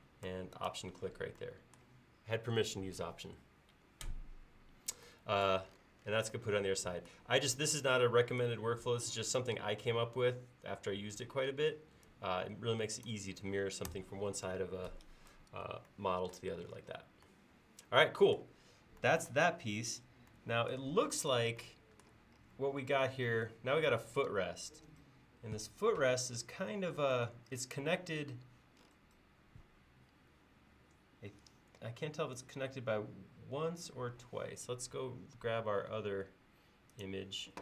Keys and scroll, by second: 11.5 space, 13.9 BackSpace.